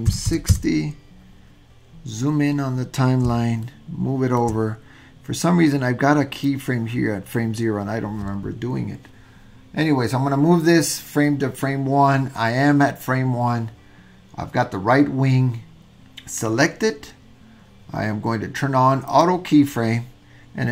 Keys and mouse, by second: 3.8 shift+middle click, 6.4 click.